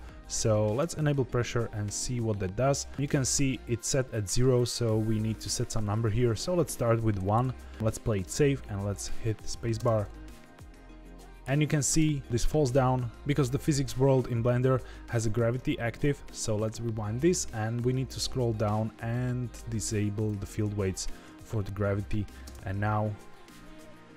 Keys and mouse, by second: 0.7 click, 5.9-7.7 drag, 9.7 space, 11.8 space, 16.0 click, 19.1-20.2 drag, 22.4 space.